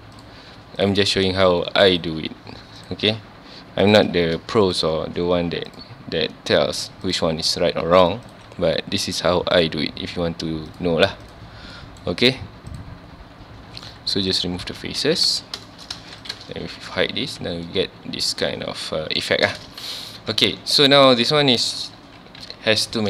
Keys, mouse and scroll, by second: 0.2 shift+click, 0.8 shift+click, 1.1 shift+middle click, 1.9 shift+click, 2.8 shift+click, 3.9 shift+click, 4.6 shift+click, 5.7 shift+click, 7.1 shift+click, 8.3 shift+click, 9.6 shift+click, 10.7 shift+click, 11.2 shift+click, 11.7 shift+middle click, 12.7 shift+click, 14.8 z, 15.0 Tab, 15.3 alt+a, 15.4 scroll down 1, 15.7-16.0 shift+middle drag, 16.0 ctrl+s, 16.2 click, 16.6 h, 17.1 scroll down 2, 17.2 alt+a, 17.7-19.6 middle drag, 19.6 scroll up 2, 19.7 ctrl+s, 20.0 click, 20.3 Tab, 20.6 scroll up 1, 20.7 1, 21.2-21.9 scroll up 1, 22.4 /.